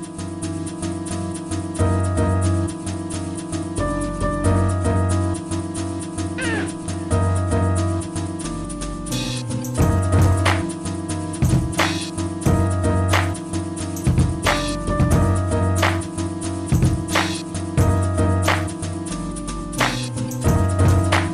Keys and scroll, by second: 4.7-7.0 typing, 11.7 w, 13.1 s, 14.2 s, 16.6-17.6 typing, 19.9-20.9 typing.